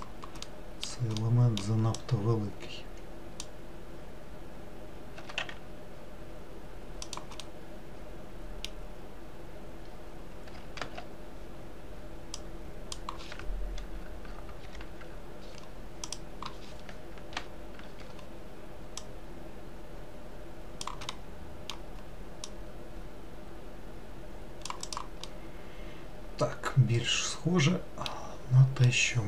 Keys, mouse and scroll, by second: 0.6-2.1 middle drag, 2.1 click, 5.3 s, 7.5-10.6 middle drag, 10.9 alt+z, 12.4 click, 14.7 ctrl+l, 16.1 click, 17.4 ctrl+l, 19.1 click, 21.2-22.5 middle drag, 22.5 click, 24.9 click, 25.3-28.4 middle drag, 28.5 scroll down 2, 29.0-29.2 middle drag.